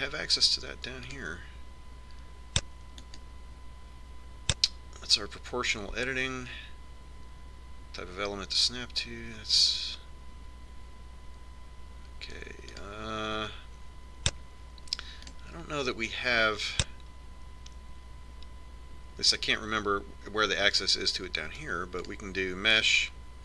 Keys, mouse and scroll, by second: 2.4-4.3 drag, 14.2-16.0 drag.